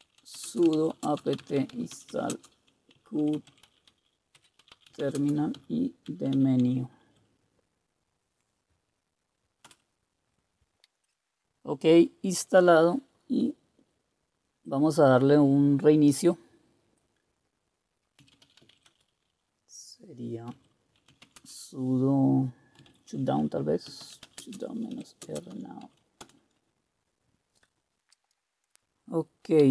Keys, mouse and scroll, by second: 0.0-7.5 typing, 9.6 Return, 18.1-26.3 typing, 29.5-29.7 typing.